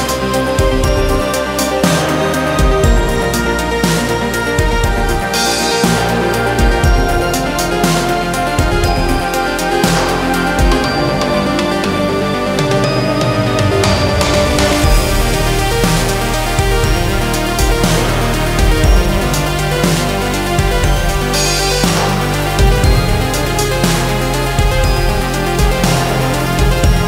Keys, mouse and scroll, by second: 0.6 ctrl+r, 2.5-2.9 scroll down 2, 2.9 click, 3.3-4.5 middle drag, 4.5 scroll down 4, 4.8-6.5 middle drag, 6.5 scroll up 1, 6.9 a, 7.8-13.6 drag, 14.1-16.6 drag, 17.6 click, 18.0-18.3 scroll up 2, 18.3 middle click, 19.0 scroll up 2, 19.2-21.8 middle drag, 22.5-22.9 scroll down 2, 22.9 scroll up 1, 23.2 middle click, 24.0 ctrl+r, 25.5-25.9 scroll up 2, 25.9-26.4 scroll down 2, 26.4 click, 26.8-27.0 scroll up 1.